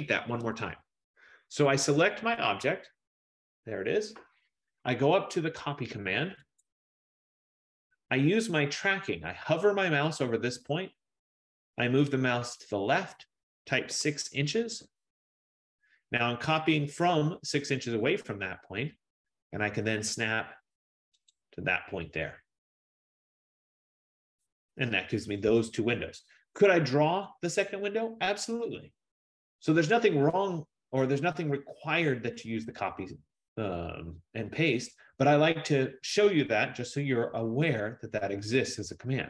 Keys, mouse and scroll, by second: 0.4 ctrl+z, 2.3 click, 3.4 click, 6.7 click, 8.3 middle click, 12.1 F15, 13.9 6, 14.8 shift+', 14.9 Return, 21.5-26.5 drag, 24.1 Return, 29.7 scroll, 32.2 scroll, 33.8-34.8 scroll.